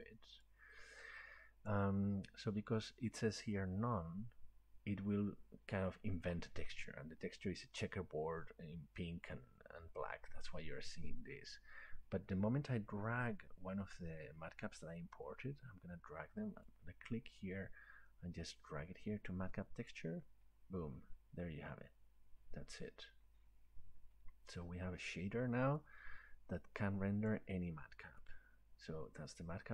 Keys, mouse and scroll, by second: 0.4 click, 1.7-6.8 drag, 19.9-25.1 drag, 27.3-29.7 drag.